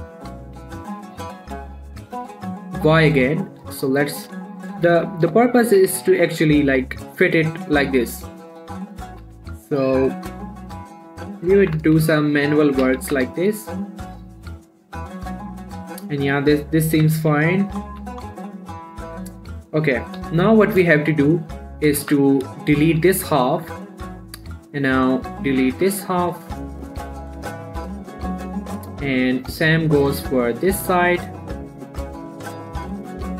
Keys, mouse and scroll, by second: 0.8 x, 2.5 y, 3.6 click, 3.9 middle click, 5.2 7, 5.6 scroll up 1, 5.8 shift+middle click, 6.1 g, 6.3 x, 7.0 click, 7.2 scroll down 1, 7.3 middle click, 7.6 scroll up 1, 7.7 middle click, 9.5 g, 9.8 z, 10.4 click, 10.6 middle click, 10.8-11.4 scroll up 1, 11.4 middle click, 12.0 g, 12.2 y, 12.9 right click, 13.1 g, 13.4 z, 14.2 click, 14.4-16.7 middle drag, 17.4 r, 17.6 y, 18.2 click, 18.3 g, 18.6 z, 19.3 click, 19.6 middle click, 20.6 7, 21.0 scroll down 1, 21.3 shift+middle click, 21.7-22.2 scroll up 1, 22.2 scroll down 1, 22.4 z, 22.9 click, 24.1 x, 25.7 click, 26.3 shift+middle click, 26.5-26.8 scroll up 1, 27.0 shift+click, 27.7 x, 28.0-29.0 scroll down 2, 29.0-29.5 scroll down 1, 29.8 click, 31.9 shift+click, 32.8 shift+middle click, 33.2-33.3 shift+drag.